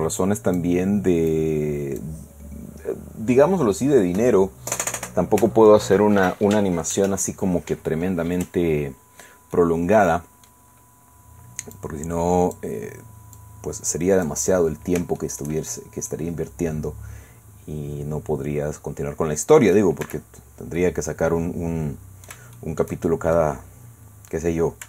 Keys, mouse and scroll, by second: 1.3 click, 9.2-9.8 scroll down 2, 9.5 middle click, 10.5 click, 10.7-11.7 scroll up 2, 11.7-12.7 drag, 13.4-14.4 drag, 15.2 shift+click, 16.1-19.9 drag, 20.0 Tab, 20.8-22.5 drag, 22.6 shift+click, 23.3 shift+middle click, 23.9-24.5 scroll down 2, 24.5-24.8 scroll up 2.